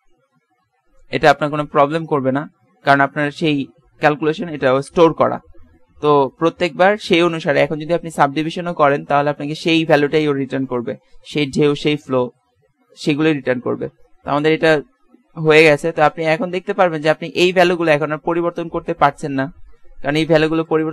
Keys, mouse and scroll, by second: 4.9-14.6 drag, 20.5-20.9 drag.